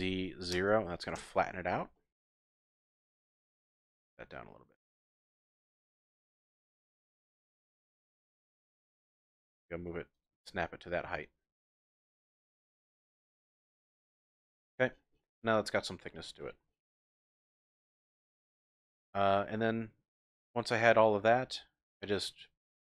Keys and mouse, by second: 0.5 KP_0, 1.2 KP_Enter, 1.9-3.2 drag, 4.2 g, 5.0 click, 6.6 ctrl+z, 7.7 g, 7.7 z, 10.1 ctrl+click, 10.6-12.2 drag, 13.2 click, 13.8-14.6 typing, 15.6-16.2 drag, 16.1 typing, 17.1-18.0 drag, 18.3-18.9 shift+drag, 19.1-19.8 drag, 20.2-21.9 middle drag.